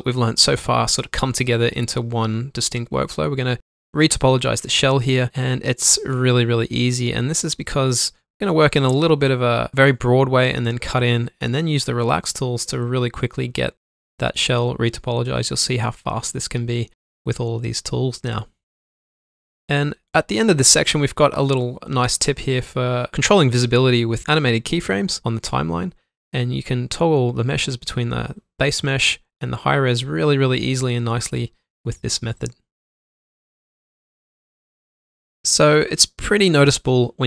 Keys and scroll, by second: 0.6 alt+m, 1.3 Tab, 2.4 shift+Num_Lock, 3.9 shift+Num_Lock, 6.0 ctrl+z, 9.7 alt+Num_Lock, 12.3 b, 14.0 ctrl+z, 15.2-15.8 typing, 15.8 alt+Num_Lock, 27.8 shift+Num_Lock, 30.7 ctrl+alt+1, 31.7 ctrl+z, 32.1 alt+q.